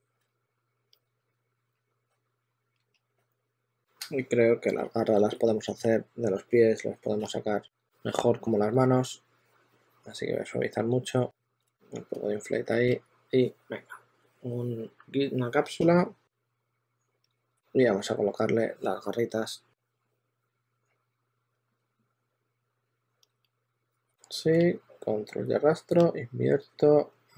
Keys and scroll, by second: 7.0 s, 12.7 s, 17.5 w, 19.8 w, 21.9-24.0 typing, 26.5 super+w.